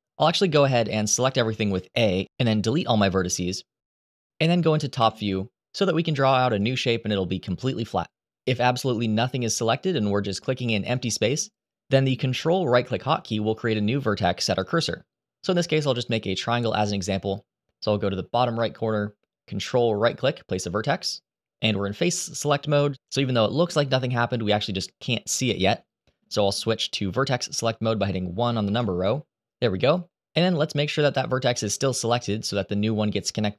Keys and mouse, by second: 1.3 Delete, 4.7 KP_7, 9.7 shift+middle click, 10.8 shift+middle click, 19.7 ctrl+right click, 28.4 1, 31.1 click.